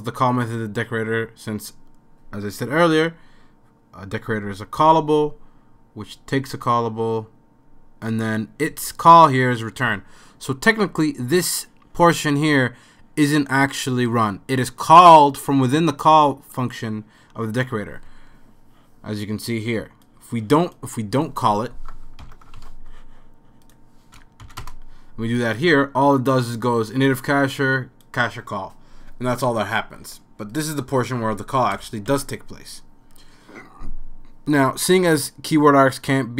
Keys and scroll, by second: 22.2 super+/, 23.0 super+s, 23.9 super+s, 23.9 super+/, 24.4 Up, 24.6 Return, 31.8 super+/.